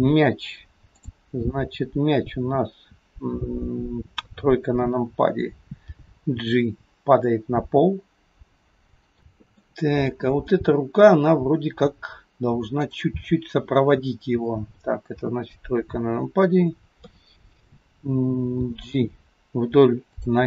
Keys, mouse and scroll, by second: 1.0 click, 1.9-2.6 scroll down 3, 4.2 KP_3, 6.0 g, 9.6 middle click, 11.4-12.8 scroll up 2, 12.8 click, 15.3 KP_7, 17.1 KP_3, 18.5 g.